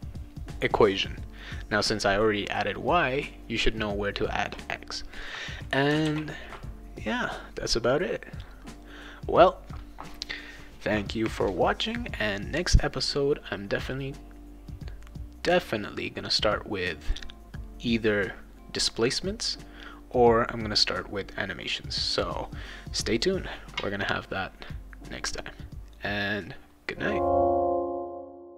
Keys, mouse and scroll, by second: 6.0 ctrl+s.